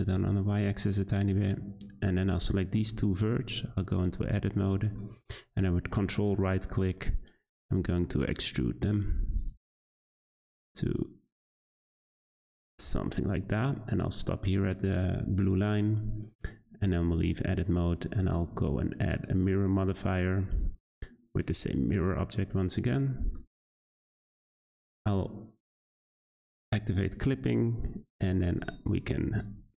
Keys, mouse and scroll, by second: 0.5-2.0 middle drag, 2.0 click, 3.0 `, 4.5 shift+middle click, 5.4-7.0 scroll down 1, 7.0 ctrl+right click, 8.3 ctrl+right click, 9.3 ctrl+right click, 10.1 ctrl+right click, 10.8 ctrl+right click, 11.5 ctrl+right click, 12.8 ctrl+right click, 16.9 Tab, 19.2 click, 19.7-20.5 middle drag, 20.5-21.3 scroll down 1, 21.3 click, 22.9 click, 23.4 middle click, 24.1 click, 25.6 click, 26.1-26.5 shift+middle drag, 26.5-27.1 scroll up 2, 27.1 Tab, 28.9 `, 29.6 g.